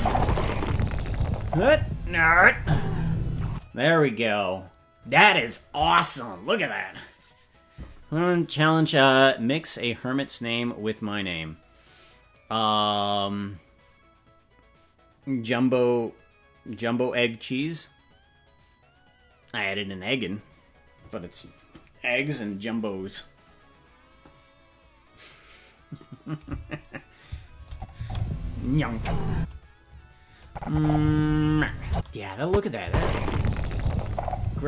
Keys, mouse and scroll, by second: 3.5 space, 27.7 click, 27.9 space, 29.3 space, 30.4 click, 30.7 space, 31.9 space, 32.4 click, 32.8 space.